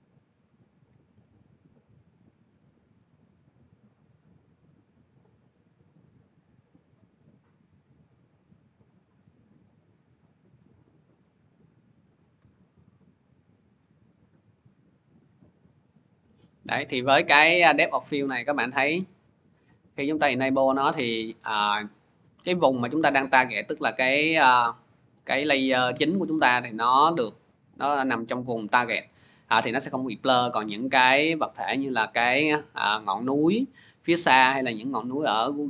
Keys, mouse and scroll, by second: 4.3 click, 6.2-10.3 drag, 13.6 shift+click, 18.7 click, 22.8-23.3 scroll, 26.1-26.8 scroll, 26.8-27.5 scroll, 27.8 click, 27.8 scroll, 28.5 click.